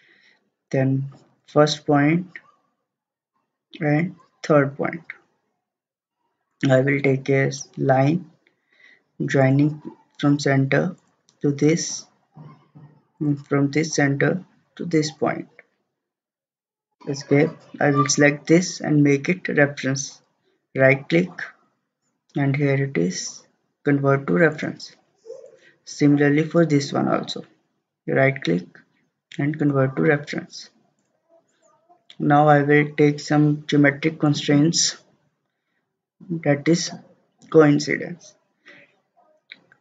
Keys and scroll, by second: 16.9 Escape.